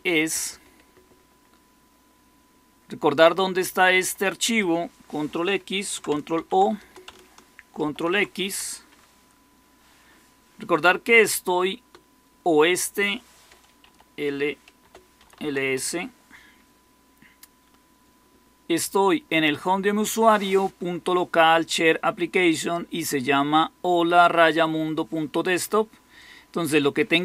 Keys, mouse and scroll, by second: 6.3 ctrl+o, 6.7 Return, 7.8 ctrl+x, 13.8 ñ, 14.9-15.8 typing.